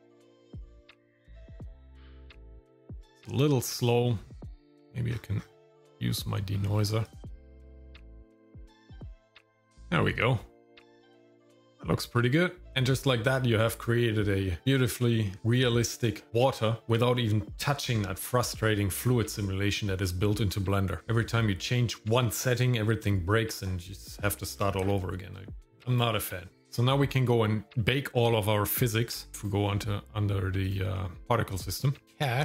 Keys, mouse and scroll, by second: 1.3 shift+middle click, 3.9 click, 5.2-5.8 scroll up 4, 7.1 click, 7.8 click, 9.1 scroll up 2, 12.7 scroll up 1, 29.3 click, 29.5 click, 30.6 click, 31.5 click, 32.0 click, 32.0 scroll down 3.